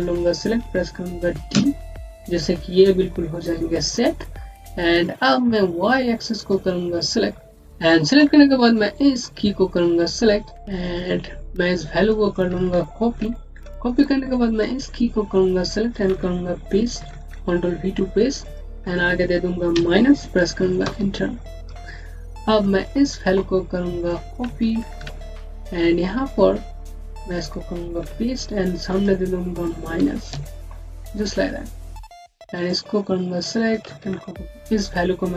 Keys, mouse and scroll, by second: 1.4-2.0 typing, 6.2 typing, 7.4 scroll down 1, 8.6 scroll down 1, 8.8 click, 11.9 click, 13.0 ctrl+c, 13.8 click, 16.9 ctrl+v, 18.3 click, 19.6 KP_Subtract, 20.7 KP_Enter, 21.8-22.5 scroll down 1, 22.5 click, 24.8 ctrl+c, 25.7 click, 27.9 ctrl+v, 28.8 click, 29.8 KP_Subtract, 30.2 KP_Enter, 31.2 scroll up 1, 32.0 click.